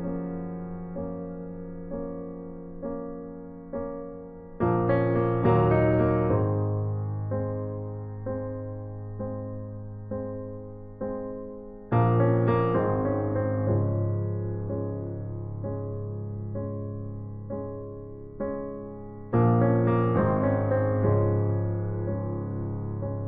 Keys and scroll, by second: 0.0-0.6 typing, 4.0-5.3 typing, 9.3 typing, 11.7 ctrl+z, 12.5-13.2 typing, 15.0 typing, 21.7-22.8 typing.